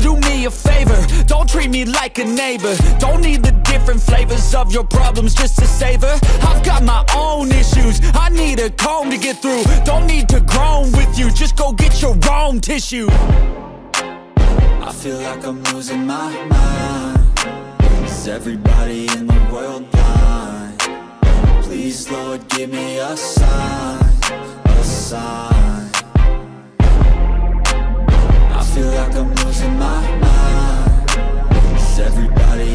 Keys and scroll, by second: 0.2 ctrl+=, 0.5 space, 2.2 ctrl+=, 3.0 ctrl+=, 3.3 ctrl+alt+z, 5.5 ctrl+-, 6.2 ctrl+-, 6.5 ], 7.5 ], 8.2 ctrl+-, 8.5 ctrl+alt+z, 9.3 ctrl+-, 10.2 ctrl+=, 14.5 ctrl+-, 14.8 ], 15.3 space, 17.1 ctrl+alt+z.